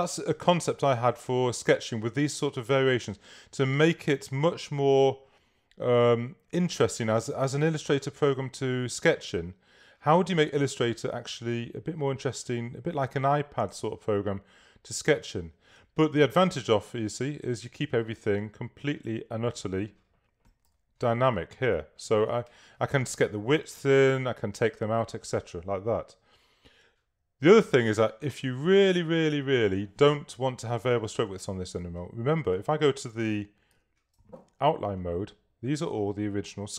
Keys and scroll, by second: 0.6 super+space, 20.7 v, 22.2 super+-, 31.3 super++, 33.8 super+y.